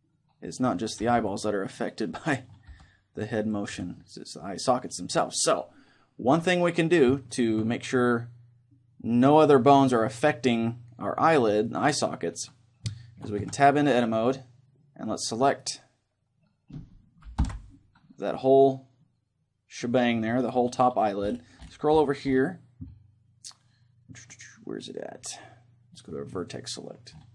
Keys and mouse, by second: 1.0 r, 1.9-3.5 right drag, 2.8 g, 3.5 click, 4.0 click, 4.0 middle click, 4.7-6.4 drag, 4.7-6.4 middle drag, 7.2-8.9 middle drag, 11.6-13.0 right drag, 13.0 middle click, 13.4 Tab, 15.6-17.4 right drag, 17.4 ctrl+l, 19.0-20.9 middle drag, 26.4-27.3 drag.